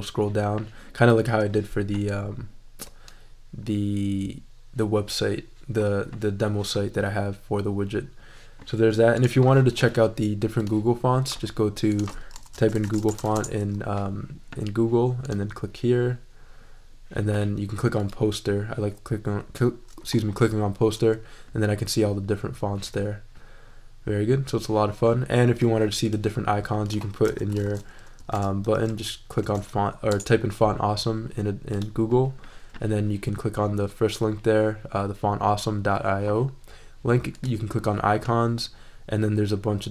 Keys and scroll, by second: 12.1-13.7 typing, 27.0-30.0 typing, 30.1 Return.